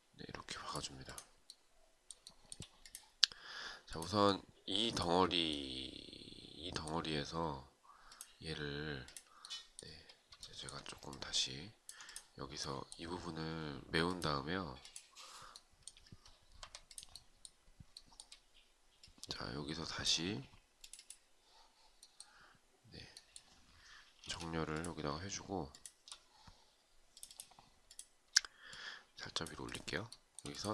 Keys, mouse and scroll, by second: 1.7 shift+right click, 10.0 shift+right click, 10.5 alt+click, 16.1 Escape, 17.5 shift+right click, 23.7 space, 25.2 shift+click, 27.4 shift+click, 29.6 shift+right click.